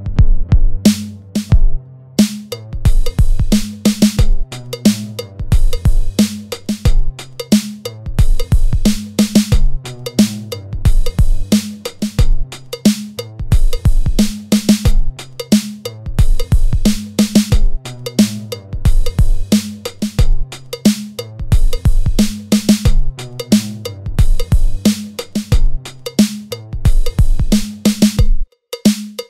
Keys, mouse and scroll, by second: 0.5 scroll down 2, 0.7 Tab, 0.7 middle click, 0.7 scroll up 3, 0.8 Tab, 1.0 ctrl+r, 1.5 Tab, 1.5 ctrl+r, 2.2 Tab, 2.2 scroll down 3, 2.3 middle click, 2.3 Tab, 2.3 scroll up 3, 2.5 ctrl+r, 2.8 Tab, 2.8 scroll down 1, 2.9 Tab, 3.0 ctrl+r, 3.6 Tab, 3.6 middle click, 3.6 scroll down 4, 3.9 shift+middle click, 3.9 click, 3.9 scroll up 5, 4.1 click, 4.2 Tab, 4.2 click, 4.3 alt+click, 4.5 g, 5.3 Tab, 5.4 click, 5.4 scroll down 5, 5.4 middle click, 5.6 middle click, 5.6-6.7 scroll up 8, 5.7 shift+middle click, 5.9 click, 6.1 Tab, 6.3 click, 6.3 3, 6.4 a, 6.6 shift+middle click, 6.7 scroll down 1, 7.7 scroll up 2, 7.9 click, 8.1 alt+click, 8.1 x, 8.3 click, 8.3 a, 8.5 i, 9.1 scroll down 1, 9.2 ctrl+z, 9.3 KP_1, 9.7 click, 9.8 ctrl+KP_Add, 10.3 ctrl+KP_Add, 10.5 i, 10.7 middle click, 10.8 scroll down 1, 10.9 e, 11.9 Tab, 11.9 middle click, 12.0 click, 12.4 middle click, 12.4 scroll up 1, 12.4 scroll down 1, 12.6 middle click, 12.6 scroll up 2, 12.8 Tab, 13.3 Tab, 13.3 scroll down 1, 13.6 middle click, 13.7 Tab, 13.9 ctrl+r, 14.1 Tab, 14.1 scroll down 3, 14.3 middle click, 14.3 click, 14.4 middle click, 14.4 scroll up 2, 14.8 shift+middle click, 14.8 scroll down 3, 14.9 middle click, 14.9 shift+middle click, 15.1 Tab, 15.1 Tab, 15.1 click, 15.3 Tab, 15.5 middle click, 15.5 scroll down 1, 15.6 middle click, 15.8 middle click, 15.9 ctrl+r, 16.9-17.3 scroll down 3, 17.0 Tab, 17.0 middle click, 17.2 middle click, 17.2 scroll up 2, 17.3 shift+middle click, 17.3 scroll down 2, 17.4 middle click, 17.4 scroll down 1, 17.6 shift+middle click, 17.8 middle click, 17.9 ctrl+s, 18.3 Tab, 18.3-18.8 scroll down 2, 18.4 Tab, 18.4 click, 18.5 shift+middle click, 18.7 shift+middle click, 18.7 click, 18.8 alt+click, 19.0 shift+d, 19.7 Tab, 19.7-20.0 click, 20.0 scroll up 2, 20.2 Tab, 20.2 scroll down 1, 20.2 a, 20.3 1, 20.6 e, 20.9 scroll down 1, 21.2 g, 24.1 middle click, 24.3 g, 25.7 scroll up 2, 25.8 middle click, 25.8 scroll down 1, 25.9 Tab, 26.0 Tab, 26.1 right click, 26.1 scroll up 1, 26.2 Tab, 26.2 click, 26.6 alt+click, 26.6 middle click, 26.7 click, 26.9 ctrl+r, 26.9 click, 27.6 Tab, 27.6 scroll down 1, 27.8 middle click, 27.8 ctrl+r, 28.3 Tab, 28.3 scroll up 1, 28.8 ctrl+r, 28.8 Tab, 28.8 ctrl+r, 29.2 middle click, 29.2 scroll down 1.